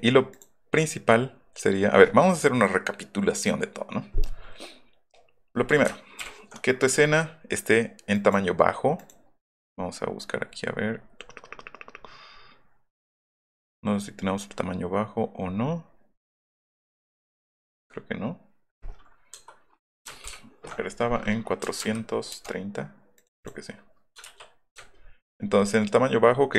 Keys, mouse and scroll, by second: 0.3 click, 6.2 ctrl+alt+i, 8.1 click, 9.0 click, 10.2 middle click, 10.4 middle click, 10.7 middle click, 11.0 middle click, 11.2 middle click, 11.5 middle click, 12.1 middle click, 12.4 middle click, 12.6 middle click, 12.9 middle click, 13.1 middle click, 13.5 middle click, 13.9 middle click, 14.2 middle click, 14.5 middle click, 15.5 middle click, 15.9 middle click, 16.3 middle click, 16.5 middle click, 20.3 ctrl+alt+i, 21.7 KP_4, 23.2 click, 23.4 click, 24.8 alt+middle click, 25.0 alt+middle click, 25.0-25.7 alt+scroll up 3, 25.3 alt+middle drag, 25.6 alt+middle click, 26.3 alt+middle click, 26.3 alt+scroll up 1.